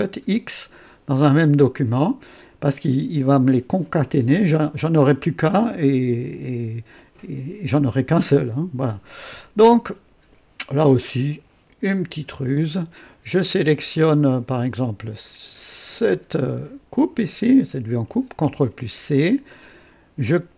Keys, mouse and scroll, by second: 14.4 click, 16.0 click, 18.4 ctrl+c.